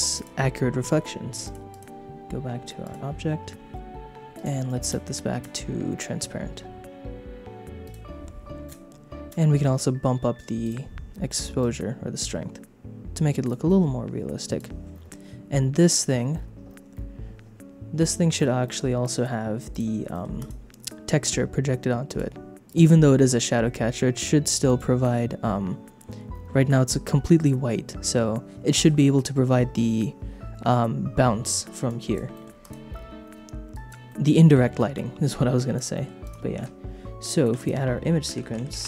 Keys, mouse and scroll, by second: 0.1 click, 1.4 click, 1.7-2.9 drag, 4.3 click, 7.8 click, 10.6 click, 11.6-13.6 shift+drag, 14.4 click, 18.0 click, 18.6 middle click, 19.0 click, 19.7 click, 20.1 middle click, 20.4 click, 22.0 click, 22.6 click, 24.6 click, 31.8 click, 32.3 middle click, 32.6 click, 33.7 click, 34.0 middle click, 35.2 click, 35.9 middle click, 36.2 click, 36.7 shift+a, 37.5 shift+a.